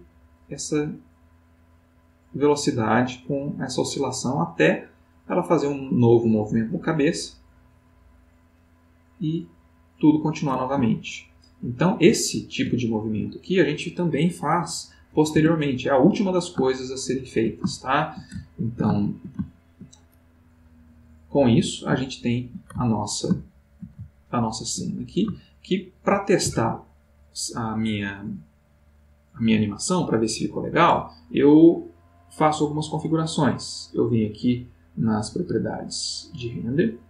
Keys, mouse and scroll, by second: 10.8-12.2 ctrl+middle drag, 12.3-13.3 ctrl+middle drag, 15.3 Tab, 16.8-18.3 ctrl+middle drag, 18.6-20.2 ctrl+shift+middle drag, 21.3 click, 22.3-26.4 shift+middle drag, 34.4 middle click, 35.7 click.